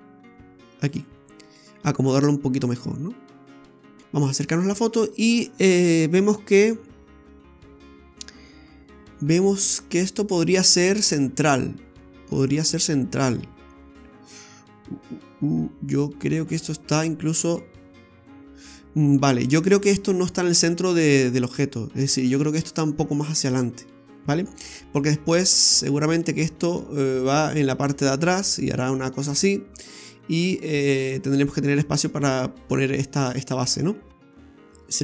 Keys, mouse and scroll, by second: 1.3 scroll down 1, 1.5 middle click, 4.0 shift+middle click, 4.0 scroll down 2, 4.2 shift+middle click, 4.6 shift+scroll up 1, 12.5 scroll down 2, 34.0-34.3 scroll down 2, 34.4 shift+middle click, 34.4 Tab, 34.9 middle click.